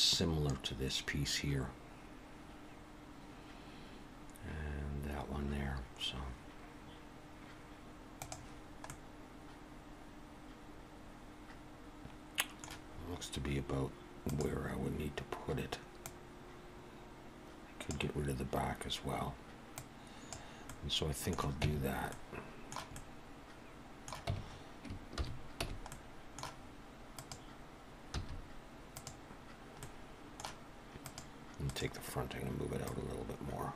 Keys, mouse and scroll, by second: 8.9 middle click, 12.9-13.5 scroll up 2, 13.5-14.3 scroll up 1, 14.3 click, 16.1 click, 19.7 click, 20.7 middle click, 21.6 Tab, 22.1 middle click, 22.9 middle click, 24.3 Tab, 25.2 shift+h, 25.6 Tab, 25.9 middle click, 27.1 click, 28.1 x, 29.8 middle click, 31.0 click, 32.8 click.